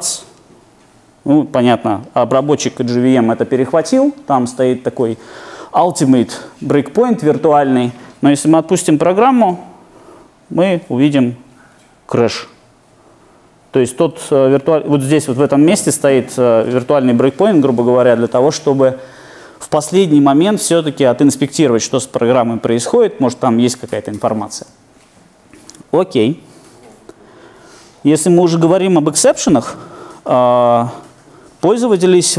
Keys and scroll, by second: 9.5 alt+super+r.